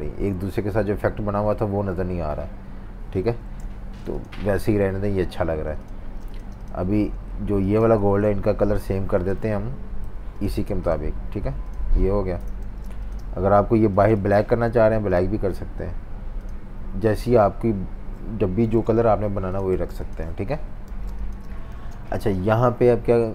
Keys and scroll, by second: 3.4 super+z, 6.0 v, 6.2 space, 8.0 super+z, 8.4 super+3, 8.9 super+3, 10.0 alt+super+i, 10.6 v, 12.3 Delete, 12.6 v, 12.8 space, 14.4 super+z, 18.7 super+z, 19.8 v, 19.8 space, 20.9 v, 21.7 v.